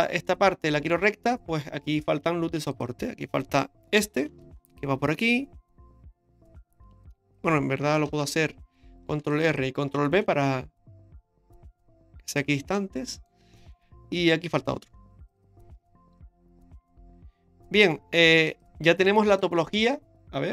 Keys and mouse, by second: 0.0 middle click, 0.9 Tab, 1.6 Tab, 2.7 click, 4.4 ctrl+r, 8.1 ctrl+z, 9.1 ctrl+r, 10.2 ctrl+b, 12.7 middle click, 13.5 shift+middle click, 15.0 ctrl+r, 16.2 ctrl+b, 19.3 right click, 19.7 middle click.